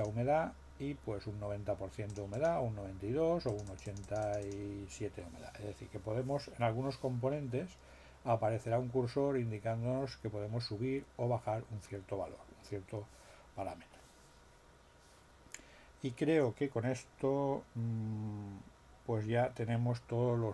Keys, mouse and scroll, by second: 2.0 click, 3.4-4.6 drag.